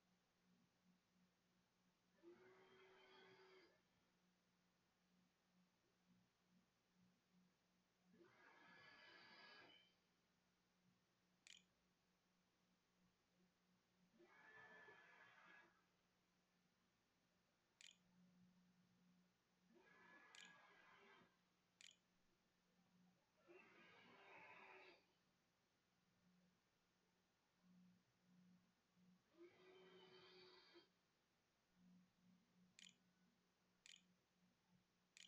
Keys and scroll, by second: 10.1-12.5 typing, 16.5-20.1 typing, 21.3 ctrl+s, 31.0-32.6 typing, 33.0 Delete, 33.9-35.2 typing.